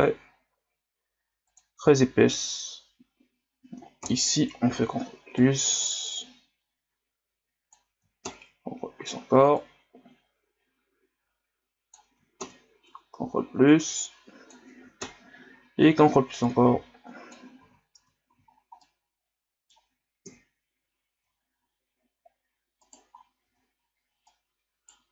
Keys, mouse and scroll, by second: 4.0 ctrl+KP_Add, 5.4-8.3 drag, 8.3 ctrl+KP_Add, 9.6-12.4 drag, 12.4 ctrl+KP_Add, 13.7-15.0 drag, 15.0 ctrl+KP_Add, 16.5-17.6 drag, 17.6 z, 18.0 Tab, 18.3 a, 18.5 scroll down 2, 18.8-20.2 middle drag, 20.2 KP_1, 21.4-21.9 ctrl+scroll down 1, 21.9 scroll up 1, 22.8 right click, 23.1 scroll up 1, 23.5 Tab, 24.3 right click.